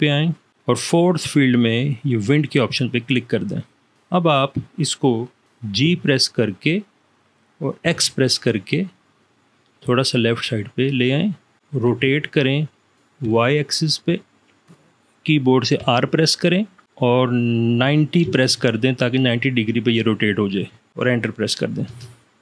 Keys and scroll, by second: 5.9 g, 8.0 x, 12.2 r, 13.5 y, 16.0 r, 18.0 9, 18.4 0, 22.2 Return.